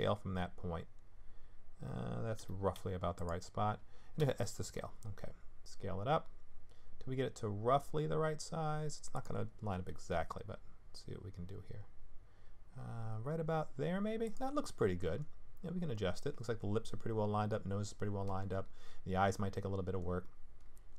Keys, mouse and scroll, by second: 2.4 g, 4.2 s, 10.1 g.